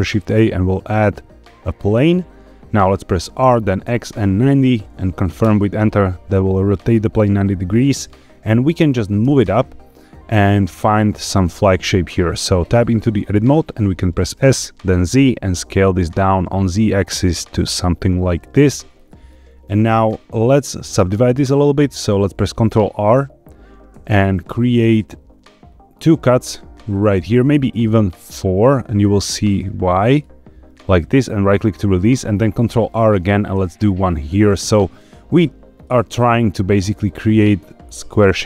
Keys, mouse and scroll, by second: 3.4 r, 3.8 x, 4.3 KP_9, 4.4 KP_0, 5.3 KP_Enter, 9.2 g, 10.9 click, 11.3 shift+middle click, 11.8 scroll up 2, 12.7 Tab, 14.3 s, 14.8 z, 18.3 click, 18.9 shift+middle click, 19.4 scroll down 1, 20.2 scroll up 1, 23.8 ctrl+r, 31.4 right click, 33.5 ctrl+r, 35.8 right click, 37.0 scroll up 2.